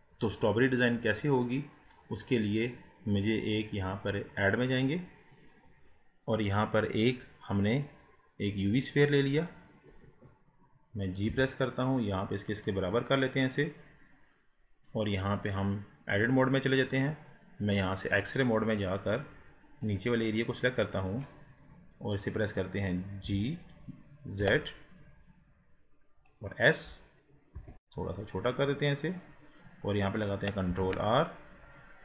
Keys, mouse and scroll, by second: 0.4 scroll down 4, 0.9-1.8 middle drag, 1.8 scroll up 3, 4.4-7.6 drag, 10.1 KP_1, 11.3 g, 15.6-19.0 drag, 19.0 scroll up 2, 19.9 click, 21.8 scroll down 2, 23.3 g, 27.7 s, 29.6 scroll up 2, 30.7 ctrl+r.